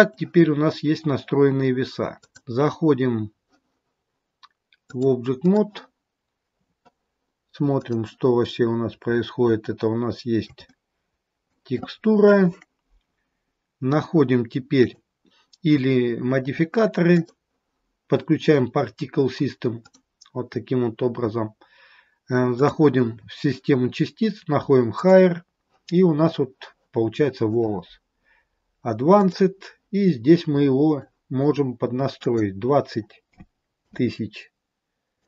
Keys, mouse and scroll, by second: 0.4-2.1 scroll down 1, 2.1 click, 4.7 click, 6.2 scroll down 2, 8.0 click, 8.7-9.5 scroll up 2, 9.7 shift+middle click, 10.7 middle click, 14.8 click, 17.0 click, 22.5 click, 25.4 click, 29.3 click.